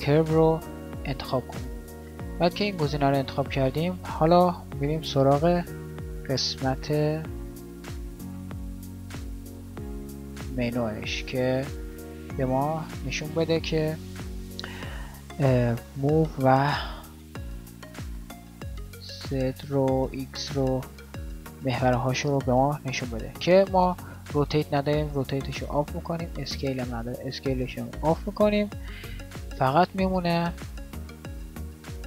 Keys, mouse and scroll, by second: 17.2-21.6 drag, 21.6 middle click, 21.9-27.1 middle drag, 27.2-27.8 drag.